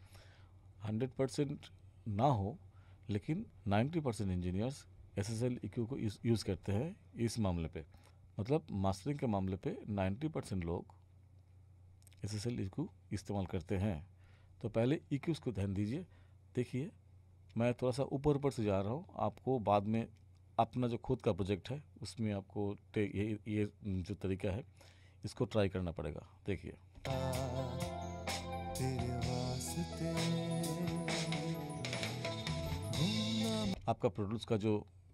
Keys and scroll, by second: 27.0 space, 33.7 space.